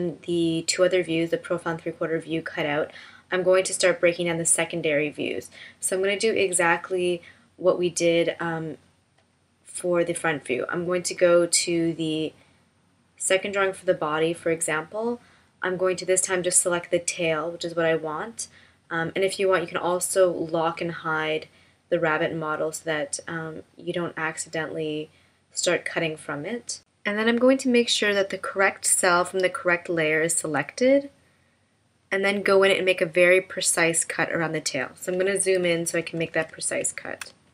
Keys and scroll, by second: 35.8 super+=, 37.2 space.